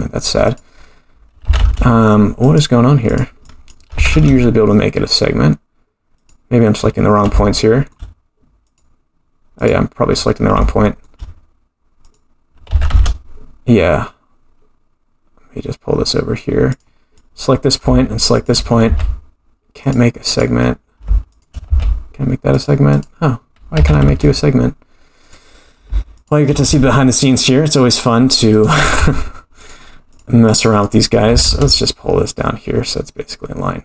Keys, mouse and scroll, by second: 0.4 click, 1.4 g, 3.1 click, 3.4 click, 4.0 g, 6.8-7.3 scroll up 3, 7.3 shift+middle click, 8.7 click, 9.6 click, 10.3 scroll up 3, 10.6 shift+middle click, 12.0 click, 12.7 g, 17.2 click, 18.3 shift+click, 18.9 f, 20.3 click, 21.3 shift+click, 21.7 f, 22.9 click, 23.8 g, 26.1 shift+click, 26.7 g, 28.9 f, 30.1 click, 31.3 g.